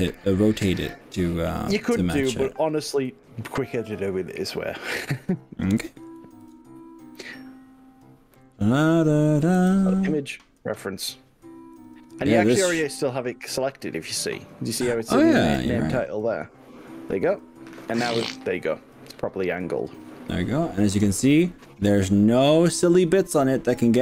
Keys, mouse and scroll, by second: 6.5 shift+a, 17.3-18.8 shift+middle drag, 19.8-20.8 shift+middle drag, 23.5 scroll down 1.